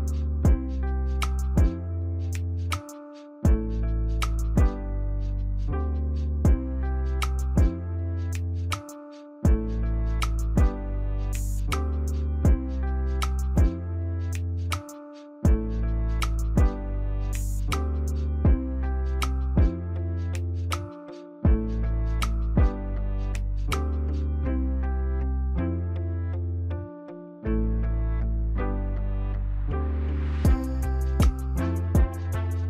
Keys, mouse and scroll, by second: 0.5 ctrl+click, 21.7 4, 22.8 BackSpace, 22.9 3, 24.3 typing.